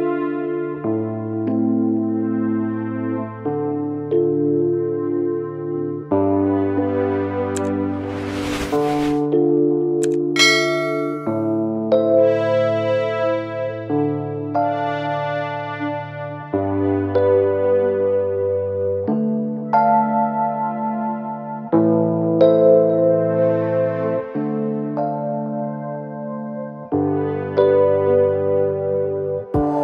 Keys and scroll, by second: 8.6 ctrl+Delete.